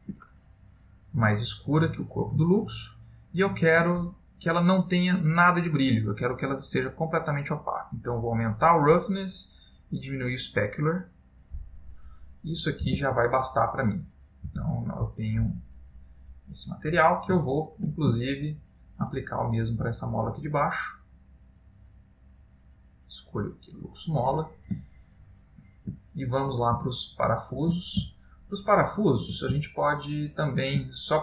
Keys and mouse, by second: 1.3 click, 6.6 click, 9.5 click, 12.3 middle click, 13.1 Tab, 14.0 middle click, 14.5 Tab, 15.0 middle click, 16.0 click, 16.8 middle click, 18.0 middle click, 18.4 shift+middle click, 18.9 shift+middle click, 19.3 middle click, 20.3 click, 22.0 click, 24.3 middle click, 25.0 ctrl+middle click, 26.1 middle click, 27.0 shift+middle click, 28.2 ctrl+middle click, 29.9 shift+middle click.